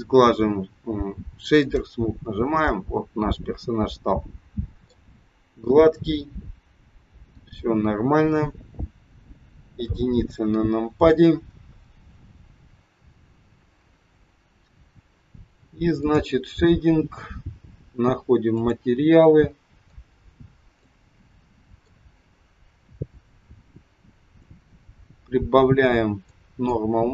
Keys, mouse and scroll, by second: 2.7 middle click, 5.3 scroll down 1, 6.8 scroll down 1, 9.8 KP_1, 12.7-13.0 scroll up 2, 13.3 scroll down 1.